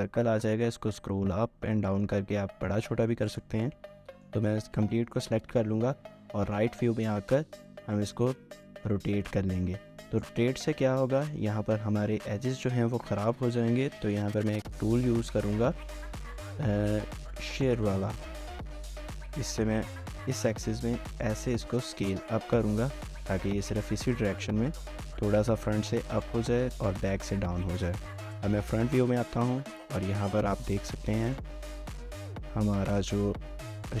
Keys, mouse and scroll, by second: 0.8 scroll down 1, 0.9-1.3 scroll up 1, 1.3-1.8 scroll down 1, 1.8-2.1 scroll up 1, 2.1 scroll down 1, 2.3 scroll up 1, 2.5 scroll down 1, 2.7 scroll up 1, 3.0 scroll down 1, 3.3 right click, 3.7 middle click, 5.1-6.0 typing, 10.1 typing, 12.7-13.4 typing, 27.3-28.5 typing, 30.7 typing, 31.3 right click, 32.6-33.1 typing.